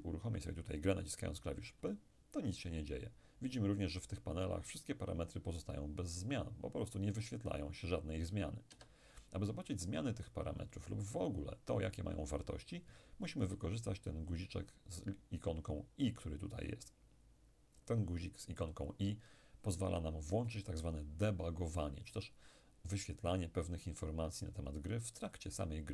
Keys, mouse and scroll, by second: 1.6 p, 8.7 Escape.